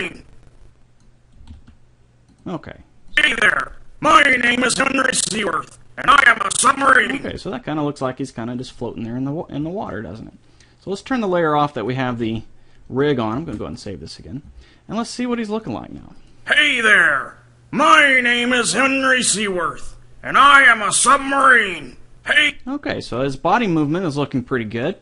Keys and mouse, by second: 1.6 g, 3.3 click, 8.6-10.5 drag, 12.1-13.7 drag, 13.5 ctrl+s, 15.5 click, 17.4 right click, 17.6 right click, 17.8 right click, 22.4-24.9 drag.